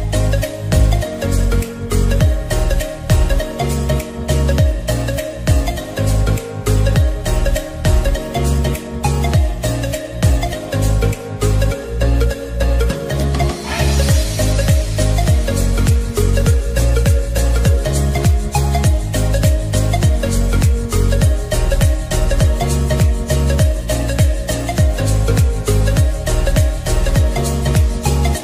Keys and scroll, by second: 6.6-7.3 typing, 25.9 ], 26.5 ], 26.5 ].